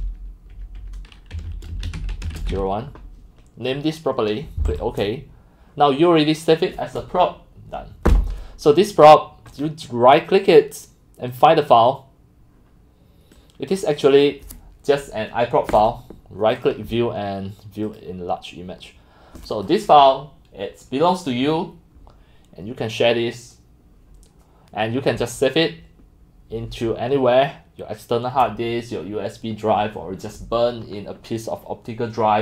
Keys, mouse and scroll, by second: 0.0-3.1 typing, 4.7 click, 5.8 drag, 9.5 click, 9.6-11.4 right drag, 11.3 middle click, 11.4 click, 13.4 middle click, 13.4-13.8 scroll down 1, 14.2-15.9 drag, 15.9-16.7 right drag, 18.4-24.7 drag.